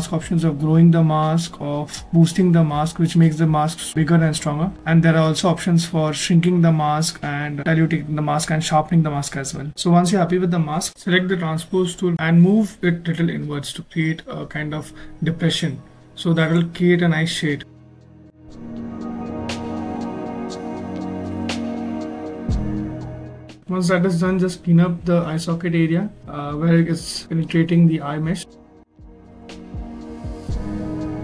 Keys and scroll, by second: 7.0 ctrl+z, 9.9 w, 11.5 q, 27.5 b, 27.5 s, 27.5 t, 27.6 ctrl+z.